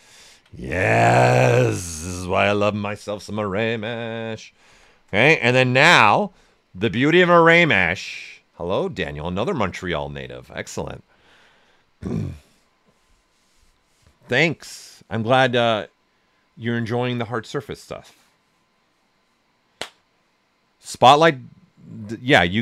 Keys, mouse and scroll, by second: 1.2 click, 1.7 right click, 3.2 q, 4.6-5.5 typing, 5.1 right click, 5.6 ctrl+right click, 7.7 typing.